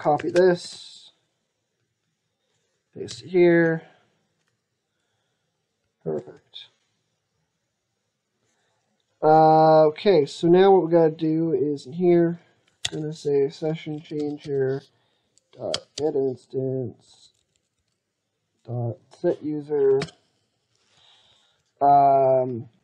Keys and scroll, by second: 0.0 ctrl+c, 0.4 alt+Tab, 2.9 ctrl+v, 5.9 ctrl+s, 12.6 ctrl+space.